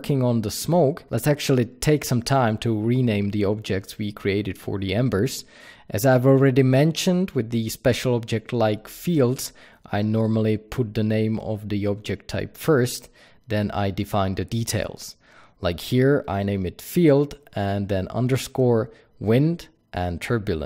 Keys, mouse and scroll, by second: 0.0 click, 5.2 click, 5.5-6.0 middle drag, 6.0 click, 6.4 click, 8.0 Return, 8.0-10.1 drag, 10.8 click, 11.6 click, 12.1-15.3 drag, 14.3 Return, 17.2 Return, 18.3-20.6 drag, 20.1 Return.